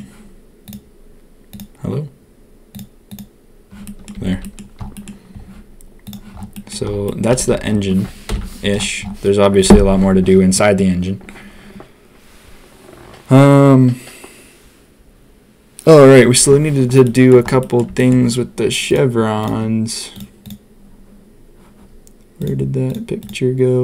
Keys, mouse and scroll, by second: 0.6-4.0 drag, 4.1 a, 4.3 a, 4.4 click, 4.9 drag, 6.0 middle click, 6.5 middle drag, 7.0 middle click, 7.4 ctrl+s, 8.2 ctrl+KP_1, 17.0 middle drag, 17.6 middle drag, 17.9 shift+middle drag.